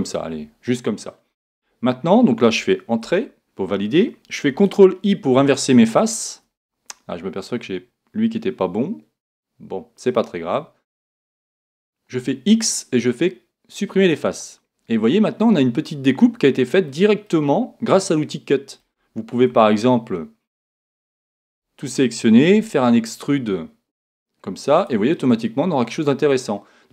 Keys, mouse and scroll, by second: 5.3 ctrl+i, 12.2 x, 14.9-16.8 middle drag, 18.9 middle click, 19.5 Tab, 20.9 Tab, 21.4 a, 22.5 e, 24.8 click, 25.1-26.8 middle drag.